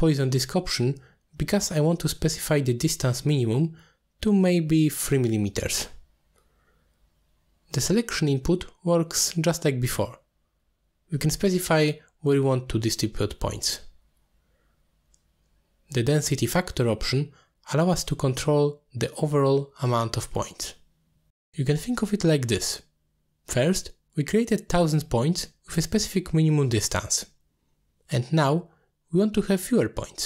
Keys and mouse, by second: 3.2 middle drag, 4.3-6.4 drag, 5.7 m, 10.1-10.5 drag, 10.9 click, 12.4 click, 13.5 click, 14.7 click, 15.0 middle click, 16.1 click, 16.7-23.5 drag, 28.9-30.2 drag.